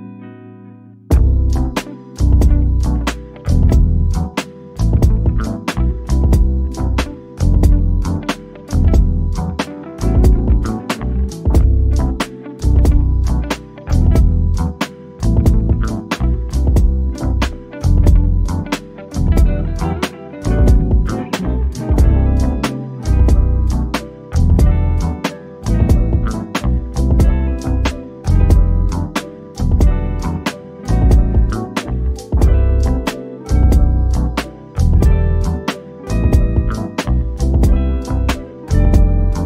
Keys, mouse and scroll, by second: 0.6 1, 1.3 Return, 2.1-2.5 scroll down 1, 2.9 click, 6.7 1, 7.4 Return, 9.9 shift+click, 16.7-17.1 scroll up 1, 17.6 click, 19.4 1, 20.0 Return, 22.2 shift+click, 24.8-25.7 scroll down 1, 27.7 middle click, 28.4-28.8 scroll up 1, 29.3 shift+click, 32.5 1, 33.1 Return, 34.6 click, 35.8 shift+click, 36.6 shift+click.